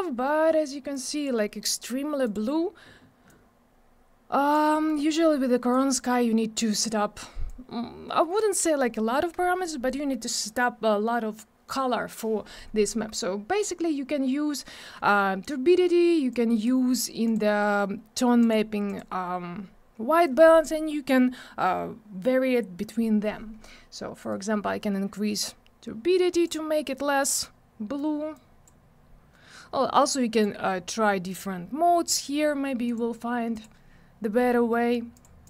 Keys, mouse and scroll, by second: 0.9 click, 2.2 click, 3.3 click, 4.7 middle click, 5.0-5.6 scroll up 1, 5.7 click, 7.5 click, 16.3 click, 17.2 click, 18.4 click, 18.9 click, 24.3 click, 28.3 click, 30.3 click, 31.3 click, 32.9 click, 33.5 click, 35.1 click, 35.4 click.